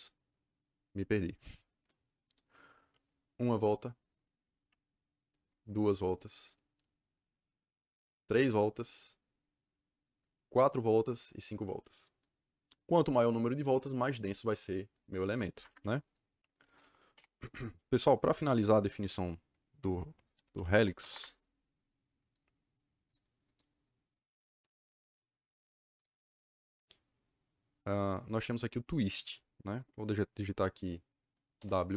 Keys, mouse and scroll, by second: 15.4 Escape, 15.6 Escape, 17.1 Delete, 20.0-21.4 typing, 22.2 click, 23.0 click, 23.4 click, 25.9 click, 31.5 w.